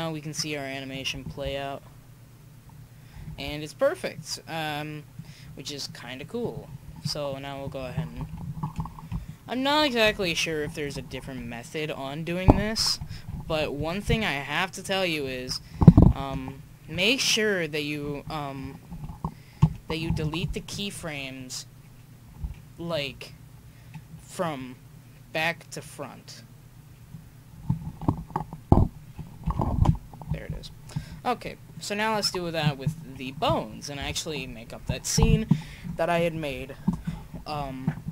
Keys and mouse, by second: 0.3-2.2 drag, 1.3 alt+a, 3.3 alt+a, 4.1-6.0 drag, 6.0 middle click, 8.2 alt+i, 9.1-10.0 Left, 10.2 Left, 10.5 Left, 10.8 alt+i, 11.5 Left, 12.0 Left, 12.1 Left, 12.2 Left, 12.2 Left, 12.6 Right, 13.1 Left, 13.5 alt+i, 14.2-15.0 Left, 15.3 Left, 15.5 Left, 15.9 alt+i, 16.9 Left, 17.4 Left, 17.5 Left, 17.6 Left, 18.0 Left, 18.3 Left, 18.9 alt+i, 22.4 s, 24.4-26.4 drag, 28.1 alt+i, 29.5 alt+i, 32.1-34.0 right drag, 34.0 KP_1.